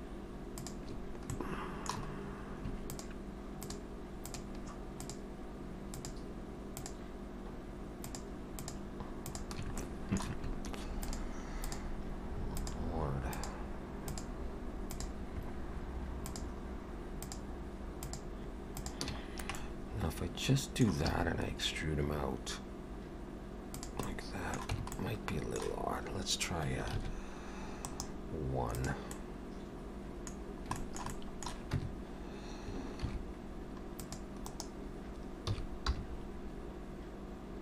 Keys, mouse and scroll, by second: 0.0 shift+click, 1.0 shift+click, 1.3 shift+middle click, 2.0-2.4 scroll up 2, 2.9 shift+click, 4.4 shift+click, 5.2 shift+click, 8.6 shift+click, 9.6 shift+click, 9.8 shift+middle click, 11.1 shift+click, 12.8-19.1 shift+click, 19.3-20.6 scroll down 2, 19.6 middle click, 21.1 e, 24.1 middle click, 24.7 Tab, 25.0 middle click, 27.0 ctrl+1, 27.8 right click, 29.1 middle click, 30.4-30.8 scroll down 3, 30.8 shift+middle click, 31.1 middle click, 31.8 Tab, 33.0 ctrl+r, 35.5 s.